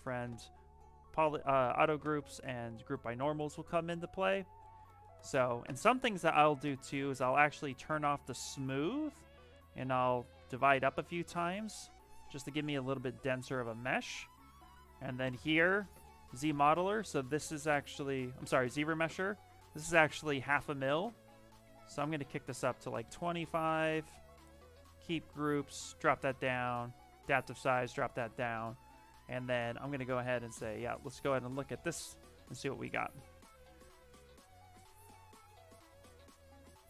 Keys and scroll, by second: 3.8 s, 8.3 shift+m, 9.0 shift+m, 10.1 ctrl+d, 10.3 ctrl+d, 10.7 ctrl+d, 13.3 shift+f.